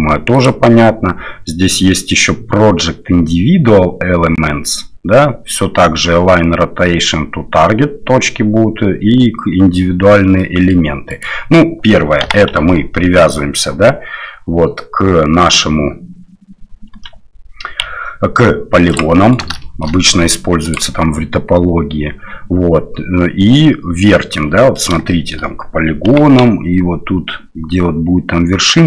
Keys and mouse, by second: 0.5-9.9 drag, 10.4 middle click, 11.1 click, 12.2 g, 19.1 middle drag, 19.6 shift+middle drag, 20.7-24.5 drag, 24.7 middle click, 25.1 shift+middle drag, 26.1 g.